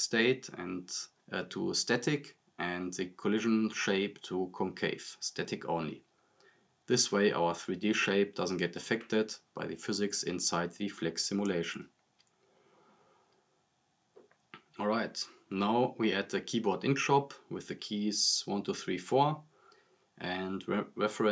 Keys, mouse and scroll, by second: 4.9 click, 9.9-10.6 drag, 17.1-18.0 typing, 19.5 click.